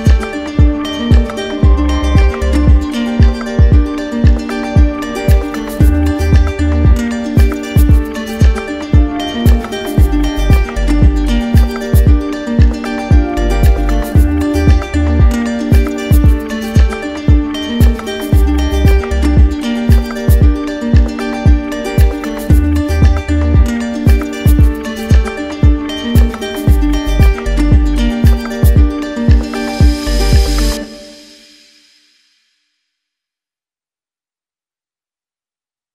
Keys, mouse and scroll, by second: 3.0-4.1 right drag, 4.4-5.5 drag, 6.4-7.5 drag, 8.0-9.1 right drag, 10.5-15.0 drag, 15.0-16.1 right drag, 16.9-18.0 right drag, 19.7-20.8 drag, 23.4 click, 24.9 right click, 25.4 right click, 25.8 shift+right click, 26.6 shift+right click, 26.8 right click, 29.7 ctrl+click, 30.2 ctrl+click, 31.0 r, 33.6 click, 34.3 ctrl+click, 34.5 q, 35.2 click, 35.8 right click.